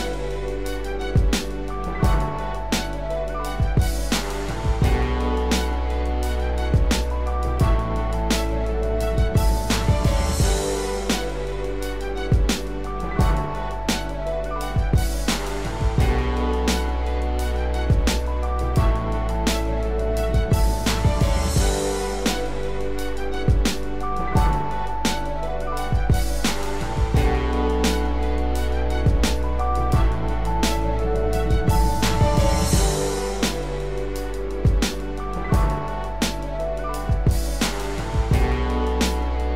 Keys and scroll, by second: 10.5 ctrl+=, 29.2 ctrl+0.